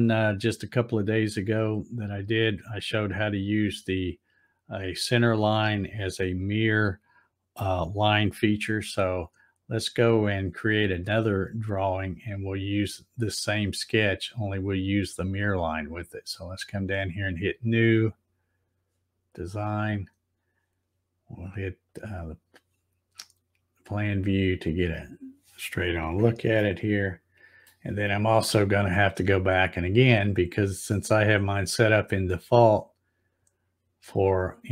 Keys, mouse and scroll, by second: 15.4 click, 19.3 click, 21.8 click, 24.6-25.3 scroll up 3, 26.5-27.6 shift+middle drag, 29.7 click, 33.3 click.